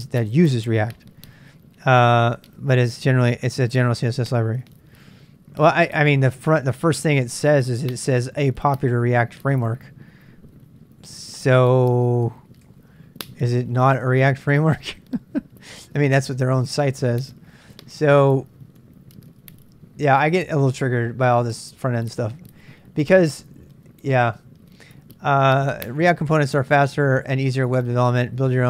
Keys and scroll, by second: 6.5-8.5 typing, 9.6 typing, 12.6 typing, 16.3-17.7 typing.